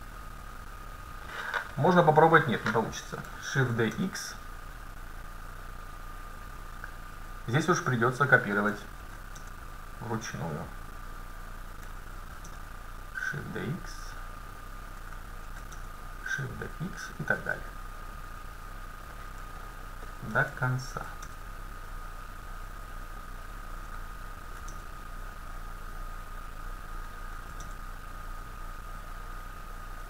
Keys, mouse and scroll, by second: 3.6 shift+d, 9.1 shift+d, 11.4-14.9 drag, 12.2 shift+d, 15.5 shift+d, 19.6-21.5 middle drag, 21.0 shift+d, 24.5 shift+d, 27.4 shift+d.